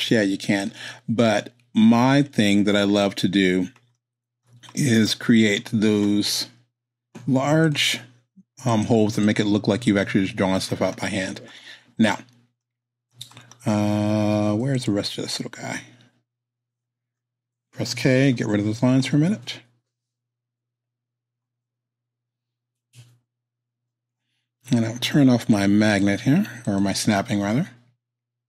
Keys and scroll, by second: 18.3 k.